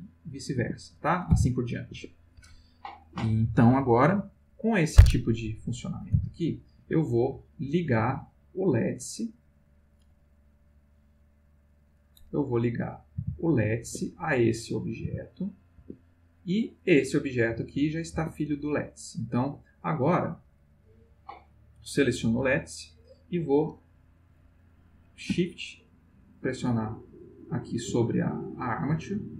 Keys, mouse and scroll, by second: 0.6 Escape, 1.1 click, 1.3 r, 2.0 Escape, 5.6 click, 6.1 r, 6.8 Escape, 7.6 click, 7.9 g, 8.7 click, 10.6 click, 11.7 click, 12.6 click, 13.1 g, 13.9 Escape, 14.5 click, 15.0 g, 15.8 Escape, 16.8 click, 17.3 g, 18.1 Escape, 20.6 click, 26.4 shift+click.